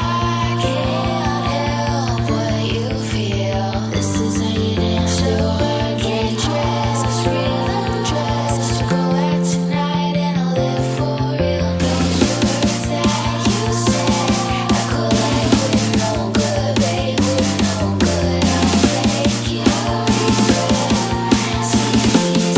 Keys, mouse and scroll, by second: 0.4 click, 3.2 shift+click, 4.0 shift+click, 5.5 shift+click, 7.2 right click, 8.8 click, 10.6-16.6 drag, 16.8-18.7 drag, 19.7 click, 21.2 click.